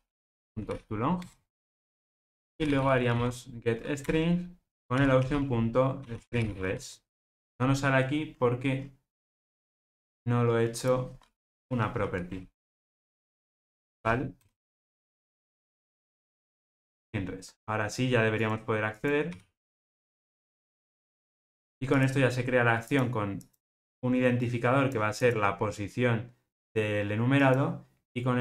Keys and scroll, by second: 0.6 Return, 1.1 Return, 4.0 Return, 15.6 alt+super+l, 20.1 Return, 21.3 ctrl+alt+o.